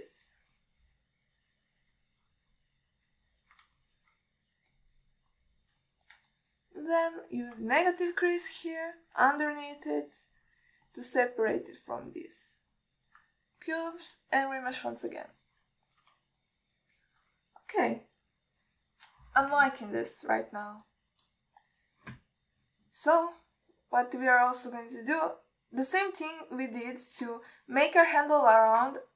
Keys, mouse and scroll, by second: 0.4 middle drag, 1.0-1.6 drag, 1.8-2.2 middle drag, 2.6 click, 3.2 middle drag, 3.8 click, 4.4-4.8 alt+middle drag, 5.1-5.4 ctrl+alt+middle drag, 6.0-6.8 drag, 7.1 middle click, 7.6 ctrl+alt+middle click, 8.6 click, 9.1 middle click, 9.5 ctrl+middle click, 9.9 click, 10.5 middle click, 11.1 click, 11.6 middle click, 12.1 click, 12.7 alt+middle click, 13.3 click, 14.0 middle click, 14.8 click, 16.0 ctrl+alt+middle click, 16.6 ctrl+alt+middle click, 17.0 middle click, 17.6 alt+shift+middle click, 19.5 KP_1, 23.6-24.3 alt+scroll down 1, 27.2-28.4 middle drag, 28.7-29.1 alt+middle drag.